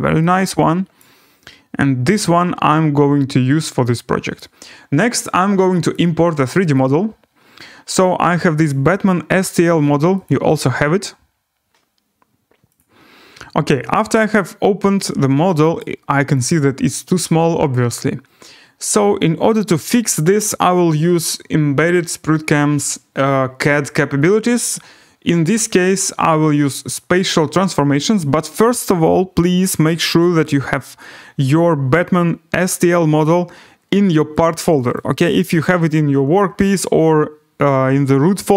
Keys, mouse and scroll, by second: 1.0 click, 2.2 click, 3.2 scroll, 4.3 right click, 5.9 click, 6.7 click, 7.4-8.4 scroll down 2, 8.7 click, 10.2 click, 12.8 click, 13.1 scroll, 13.3 scroll down 6, 13.6 scroll, 13.9 scroll down 4, 14.0 scroll, 14.5 scroll down 2, 14.6 scroll, 14.9 scroll up 3, 15.8 right click, 15.9 scroll, 17.2 right click, 25.9-31.0 drag, 34.4 click, 34.9 click.